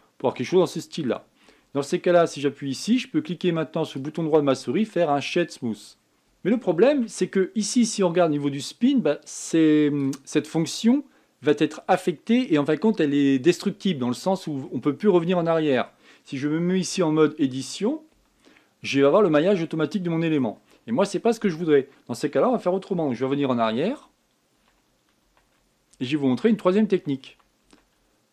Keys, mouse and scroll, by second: 0.1 click, 0.6-1.2 scroll down 8, 1.4-2.9 middle drag, 2.9 Tab, 4.6-6.1 right drag, 6.1 Tab, 7.7 Tab, 9.1-10.7 drag, 15.4-17.6 middle drag, 17.6 Tab, 18.9 Tab, 19.7-22.9 middle drag, 24.3 ctrl+z, 24.6 ctrl+z, 25.0 ctrl+z, 25.3 ctrl+z, 25.7 ctrl+z, 26.0 ctrl+z, 26.3 ctrl+z, 26.7 ctrl+z, 27.7 ctrl+z, 28.0 ctrl+z.